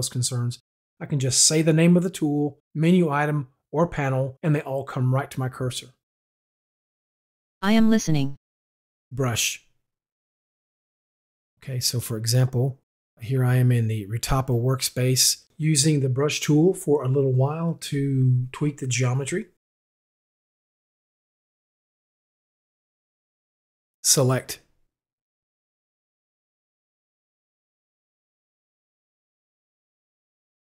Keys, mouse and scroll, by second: 6.0 middle click, 6.7 click, 7.4 middle click, 9.6 u, 10.7-11.5 right drag, 11.9 click, 12.0 right click, 12.6 click, 14.9 click, 17.1 click, 17.5 shift+click, 18.0 shift+click, 18.7 shift+click, 19.8 click, 19.9 shift+click, 20.3 click, 22.0 click, 22.5 click, 22.8 click, 23.4 click, 25.4 u, 27.1-27.6 scroll down 2, 28.0 click.